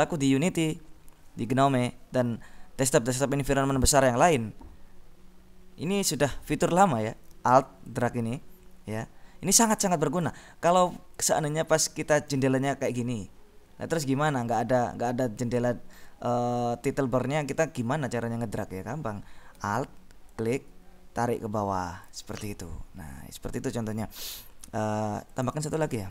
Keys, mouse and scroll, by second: 8.0-10.9 alt+drag, 11.8-13.5 alt+drag, 20.5-22.7 alt+drag, 25.6 click.